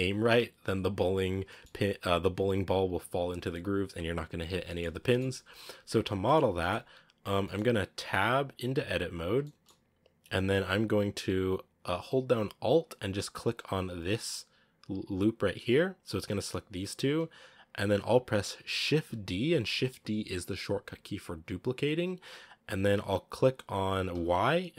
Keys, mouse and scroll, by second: 1.4-4.8 middle drag, 4.8-5.2 scroll down 3, 4.9 shift+middle drag, 6.1-6.7 middle drag, 6.7-7.3 scroll down 2, 7.3 middle click, 7.4 scroll down 1, 8.0 Tab, 9.3-13.3 shift+middle drag, 13.3 alt+right click, 13.8-15.6 scroll down 1, 15.6 scroll up 2, 16.1-17.5 scroll down 1, 17.5-18.4 scroll up 1, 18.8 shift+d.